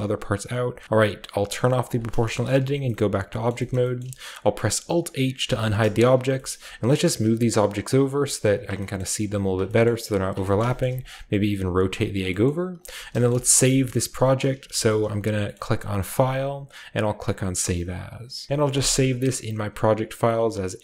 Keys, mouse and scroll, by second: 0.0-0.5 typing, 0.5-1.8 middle drag, 0.8 Tab, 0.8-1.8 scroll down 1, 1.8-3.1 drag, 2.5 Tab, 3.4 shift+middle click, 3.7 shift+middle click, 3.7-4.7 shift+scroll up 1, 3.9-5.3 shift+middle drag, 4.7-5.3 alt+shift+scroll up 1, 5.3 alt+h, 5.6-6.1 scroll down 1, 6.1 shift+middle drag, 6.5-7.8 middle drag, 7.0 g, 7.8-8.1 drag, 8.1 g, 9.2-10.0 typing, 10.7-12.4 shift+scroll up 1, 11.2-13.6 typing, 12.9-14.2 scroll down 1, 14.2-15.2 drag, 14.4-15.2 scroll up 1, 15.2 shift+middle click, 15.2 scroll down 1, 16.0 click, 18.5 typing.